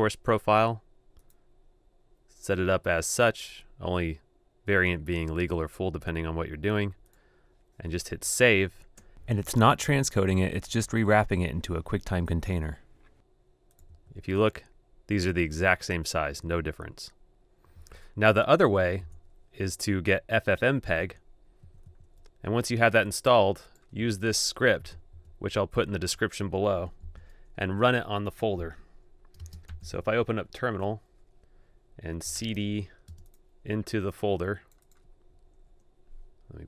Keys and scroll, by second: 10.2 super+Tab, 13.7 super+2, 17.5 super+3, 18.8 super+BackSpace, 20.8 super+Tab, 24.9 super+c, 26.9 super+h.